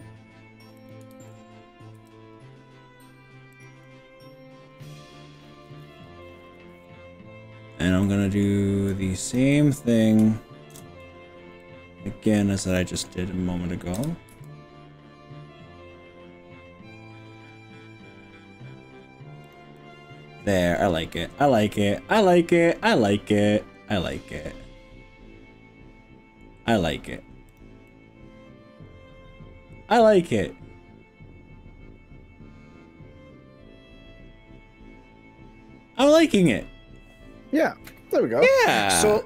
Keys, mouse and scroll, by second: 0.8 click, 1.1 ctrl+z, 2.0 g, 3.5 click, 3.8-7.9 middle drag, 8.0 middle click, 8.9 click, 9.5 middle click, 10.7 ctrl+KP_Add, 11.6-13.1 middle drag, 13.5 ctrl+KP_Add, 14.0 KP_3, 14.3 r, 19.5 click, 19.8-26.5 middle drag, 20.4 click, 26.5-27.1 scroll down 4, 27.5 click, 27.9-37.0 middle drag.